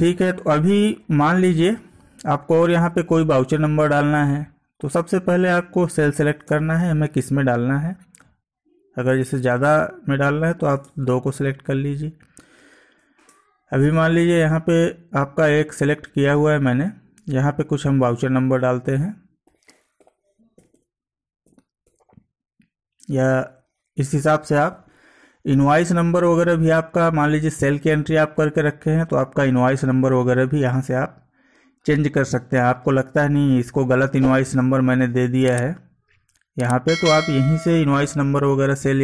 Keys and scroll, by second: 1.1 Down, 6.4 space, 9.7 Down, 10.8 space, 13.2 space, 15.6 Up.